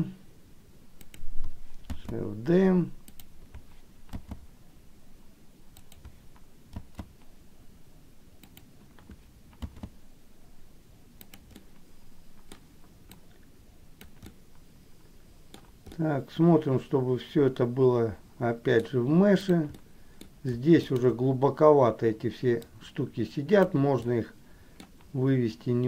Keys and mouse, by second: 2.3 shift+d, 7.3 shift+d, 9.9 shift+d, 11.9 middle click, 13.2-14.3 drag, 14.4-15.8 middle drag, 16.2-19.0 middle drag, 19.5 click, 20.0 middle click, 21.0 shift+click, 22.9 click, 24.4 middle click.